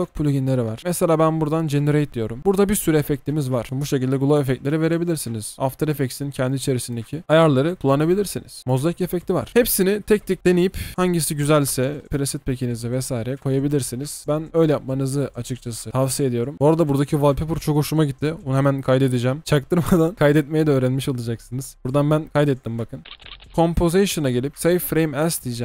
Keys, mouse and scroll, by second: 4.7 ctrl+x, 4.8-6.0 typing, 8.6 double click, 23.1 double click.